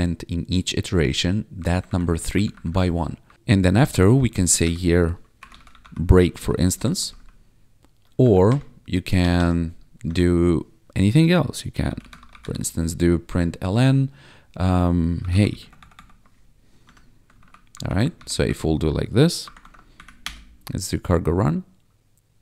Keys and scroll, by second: 1.5 Up, 2.3 Down, 3.7 ctrl+Right, 4.6 Return, 5.1-6.7 typing, 7.0 ctrl+s, 8.0 Down, 8.5 Return, 9.2 BackSpace, 10.0 Tab, 11.6-12.9 typing, 13.3 Tab, 14.9-15.9 typing, 16.8 Tab, 17.3 ctrl+s, 17.7 Up, 18.1 ctrl+/, 18.3 ctrl+s, 18.4 ctrl+d, 19.6 ctrl+`, 19.9 Up, 20.2 Return.